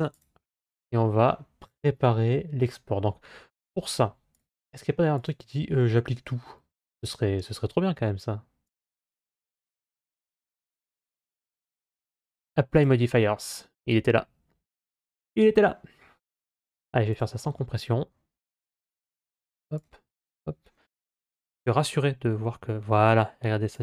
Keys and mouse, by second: 4.2-6.9 drag.